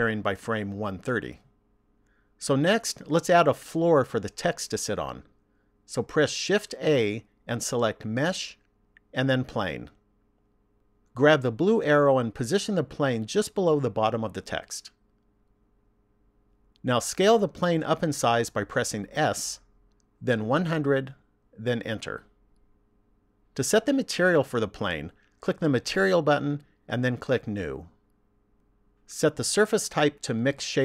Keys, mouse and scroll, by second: 6.8 shift+a, 12.8 click, 18.9 s, 26.0 click, 27.9 click.